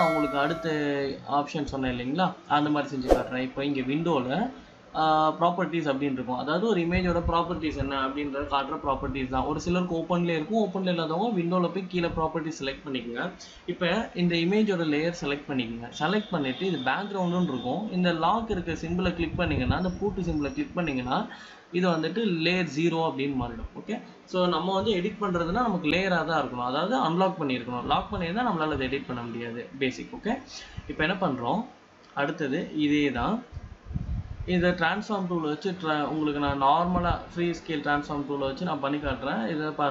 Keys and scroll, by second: 37.8 ctrl+t.